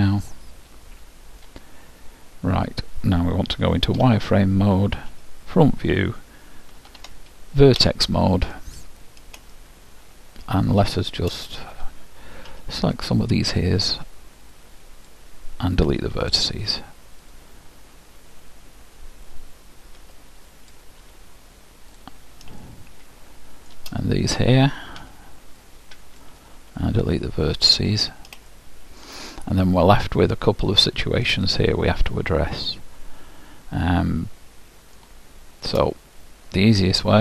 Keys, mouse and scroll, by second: 3.5 z, 5.1 KP_1, 6.9 ctrl+Tab, 9.5-11.2 middle drag, 12.5 b, 16.2 Delete, 20.0 b, 21.1 Delete, 22.7 middle click, 25.0 b, 26.7 Delete, 28.5-33.3 middle drag, 35.9-37.2 middle drag.